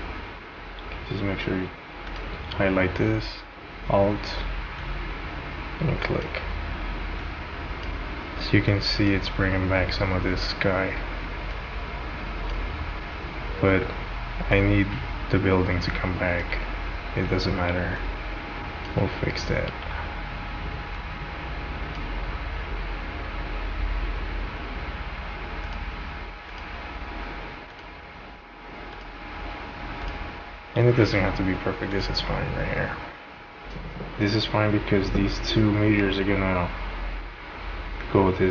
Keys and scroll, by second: 0.7 ctrl+z.